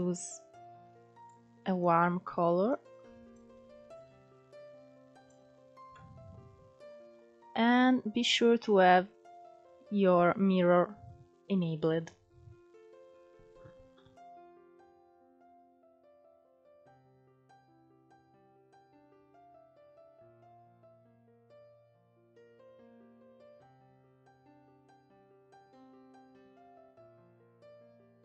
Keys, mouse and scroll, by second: 4.8 middle click, 5.4-6.1 scroll up 1, 6.1-10.1 scroll down 14, 10.1-12.2 scroll up 3, 15.2 scroll up 4, 15.3 scroll down 1, 15.5 click, 16.3 scroll down 1, 16.4 middle click, 16.8-18.0 scroll up 5, 17.0 middle click, 17.5 shift+middle click, 18.0 middle click, 18.4 click, 19.1 scroll down 4, 19.3 middle click, 19.7-20.4 scroll up 4, 19.9 middle click, 20.1 shift+middle click, 20.4 shift+middle click, 21.3 click, 21.9 middle click, 22.2 click, 22.8 middle click, 23.0 scroll up 1, 23.2 click, 23.7 scroll down 3, 23.8 scroll up 2, 24.2 f, 24.5 click, 25.3 scroll down 5, 25.5 scroll up 2, 25.6 middle click, 26.0 middle click, 26.4 scroll down 5, 26.6 middle click, 27.1 click, 27.9 scroll down 3, 28.0 middle click.